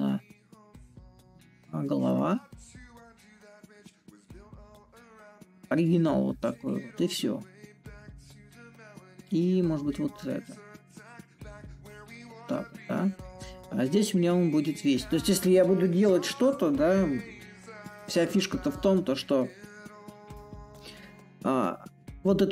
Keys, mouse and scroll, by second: 1.8-6.8 drag, 9.8-14.8 drag, 17.5-22.5 drag.